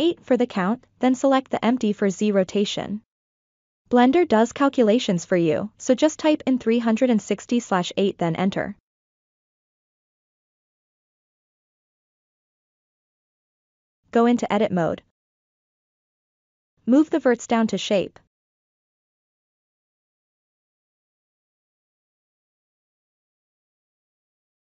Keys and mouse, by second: 5.3-9.0 drag, 10.2-10.6 ctrl+middle drag, 10.9-11.4 middle drag, 12.0 Tab, 13.5 Tab, 14.2-14.6 shift+middle drag, 14.8 click, 15.6 1, 16.7 click, 17.6-18.7 drag, 19.3 click, 20.5-22.8 drag, 23.3-24.2 middle drag.